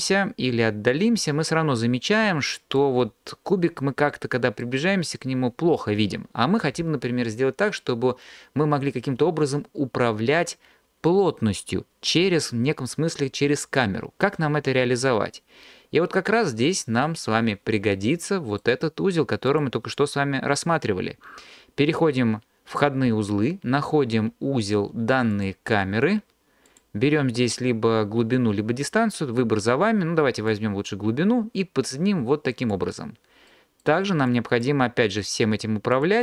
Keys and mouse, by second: 2.2 click, 2.2 middle click, 19.6-25.5 drag, 26.7 click, 30.5 drag, 34.3 click, 35.9-36.2 drag.